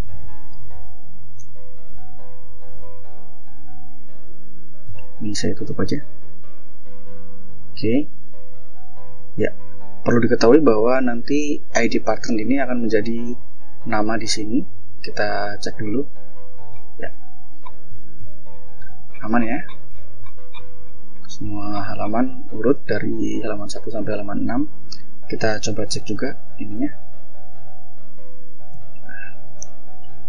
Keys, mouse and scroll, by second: 3.2 click, 4.4 ctrl+l, 5.5 F4, 7.0 click, 9.1 click, 10.6 click, 11.0 click, 14.1 click, 16.2-16.9 scroll up 2, 16.9 scroll up 1, 17.8 scroll up 2, 18.6-20.6 scroll down 8, 21.0-21.8 scroll down 2, 22.8 click, 23.8 click, 24.4 click, 25.5 F4, 27.6 ctrl+click, 28.2 ctrl+l, 29.6-30.2 typing.